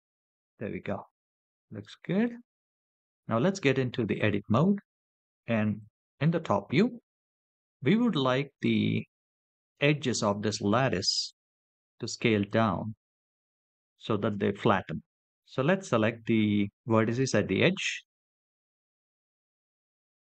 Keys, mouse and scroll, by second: 0.5-1.5 middle drag, 3.3 KP_7, 4.4 Tab, 5.8-7.1 drag, 8.0-9.7 shift+drag, 11.0-12.3 shift+drag, 13.1-14.4 shift+drag, 17.6 click.